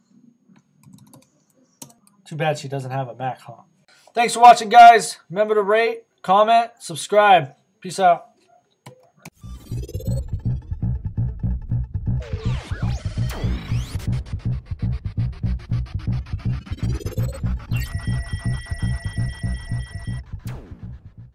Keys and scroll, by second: 1.8 Return.